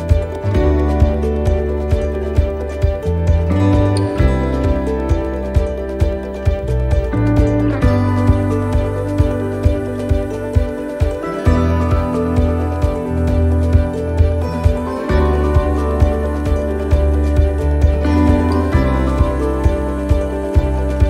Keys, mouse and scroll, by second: 0.1 l, 1.1 shift+d, 1.6-2.2 scroll down 1, 2.2 click, 4.7 shift+d, 5.8 click, 9.0 click, 10.6 shift+d, 11.8 click, 16.6 shift+d, 17.7 click.